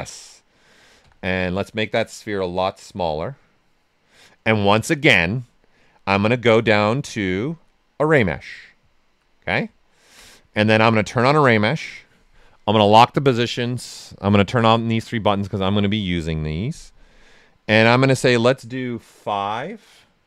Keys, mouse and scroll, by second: 1.0 w, 1.7-4.1 drag, 4.1 click, 5.1 click, 8.9 alt+right click, 9.7-11.0 ctrl+right drag, 11.0 click, 17.0 click, 19.4 5.